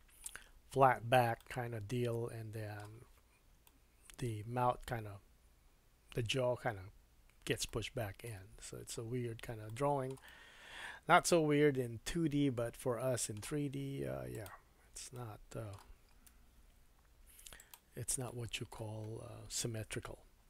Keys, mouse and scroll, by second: 0.5-1.4 scroll down 2, 1.4 middle click, 3.6 middle click, 7.7 middle click, 8.5-9.4 scroll up 2, 9.6 shift+middle click, 10.2 middle click, 13.0-14.3 middle drag, 14.3 click, 15.1 middle click, 16.3 3, 17.6 click, 18.3 middle click.